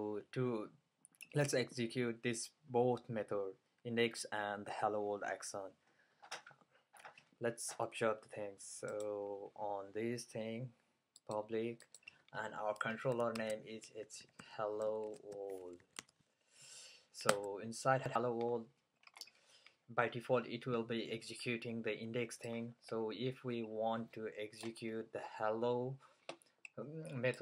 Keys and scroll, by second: 13.2-16.6 typing.